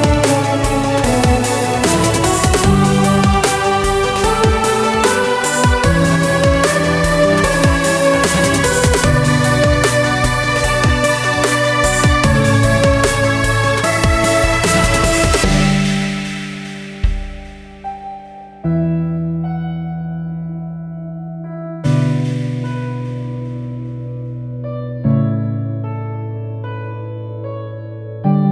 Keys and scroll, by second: 9.2 Delete, 24.3-26.7 typing, 27.9-28.5 typing.